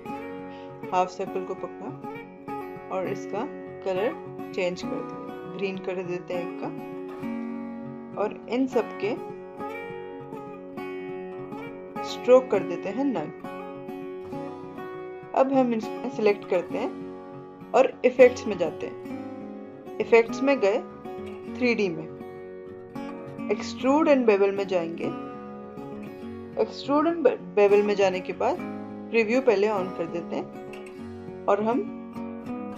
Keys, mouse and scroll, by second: 5.5-8.8 drag, 19.2 click, 22.1 click, 29.6 click.